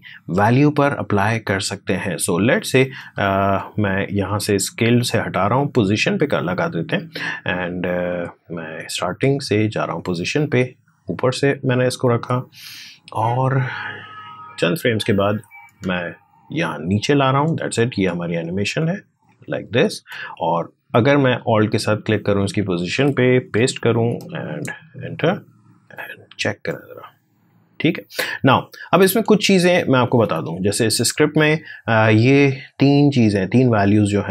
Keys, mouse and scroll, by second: 1.8 click, 7.8-17.6 drag, 17.6 click, 18.4 space, 21.5 alt+click, 23.2 ctrl+v, 28.8 space, 29.9 alt+Tab, 31.0-34.3 drag.